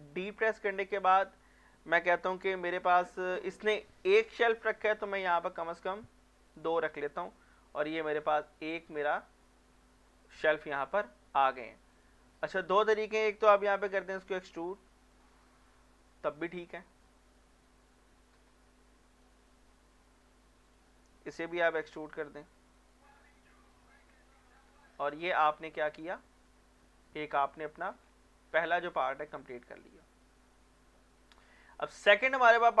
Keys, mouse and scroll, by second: 0.1 shift+d, 2.2 z, 6.5 click, 6.8 scroll down 1, 7.1-8.9 middle drag, 9.3 scroll up 1, 9.5-10.9 middle drag, 11.5-12.0 scroll up 1, 12.0 click, 12.3 middle click, 12.7 scroll up 1, 12.9 middle click, 13.8 e, 15.1 click, 15.4 middle click, 16.4 scroll down 1, 16.8 shift+middle click, 17.7-19.5 drag, 19.5 middle click, 19.8 shift+middle click, 20.3-20.7 scroll up 1, 20.7 click, 21.5 e, 22.8 click, 23.1 scroll down 1, 23.2 middle click, 24.1 Tab, 24.8 scroll down 1, 24.9 middle click, 25.0 scroll up 1, 25.4 click, 26.0-27.9 middle drag, 27.9 scroll down 1, 28.6-29.2 scroll up 1, 31.4-32.0 scroll down 1, 32.0 click, 32.3 middle click, 32.6 scroll up 1.